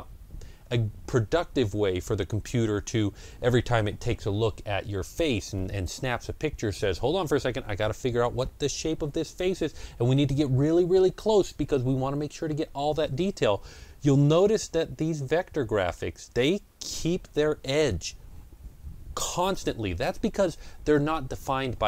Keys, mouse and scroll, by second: 15.0-18.4 middle drag.